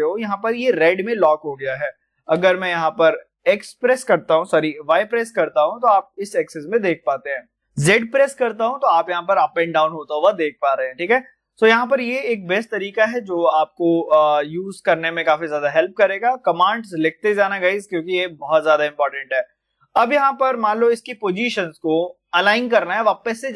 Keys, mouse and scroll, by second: 0.0-0.4 typing, 7.9-8.6 typing, 10.2 typing, 17.2 click, 18.6-20.5 scroll up 1, 20.6 middle click, 21.4 click.